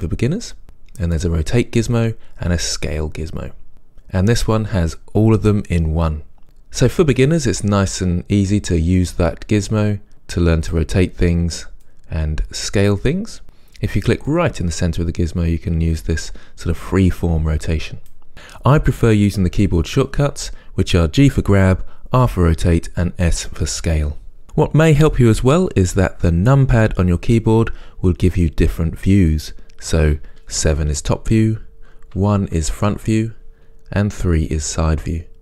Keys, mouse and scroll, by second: 1.7 click, 2.6-6.4 drag, 7.5-24.4 drag, 30.6 KP_7, 32.2 KP_1, 34.2 KP_3.